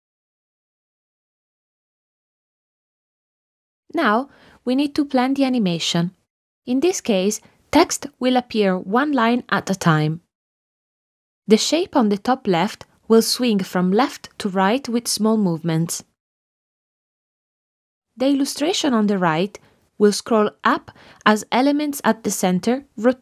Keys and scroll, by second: 0.7 space, 1.0 7.